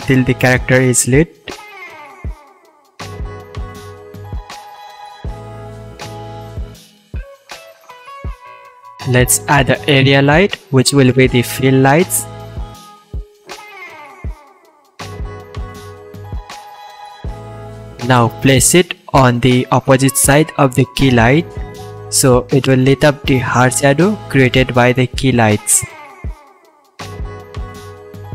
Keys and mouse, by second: 3.0 r, 3.4 click, 3.6 r, 4.3 middle click, 4.5-7.2 drag, 7.2-8.6 middle drag, 8.6 shift+a, 11.1-12.3 middle drag, 12.3-18.0 drag, 16.9 r, 18.0-19.8 middle drag, 19.8-23.8 drag, 23.2 r, 23.8-26.3 middle drag, 24.3 s, 26.3-28.3 drag.